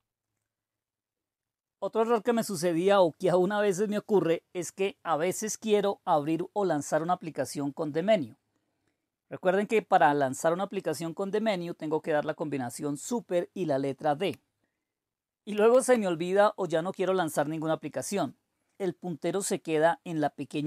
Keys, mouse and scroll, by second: 15.5 super+d.